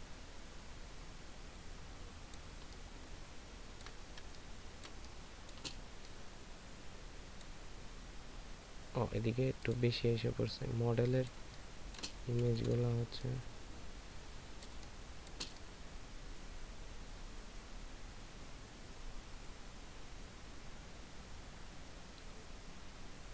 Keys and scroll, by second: 3.0 ctrl+space, 4.2 ctrl+space, 11.7 ctrl+space, 12.6 ctrl+[.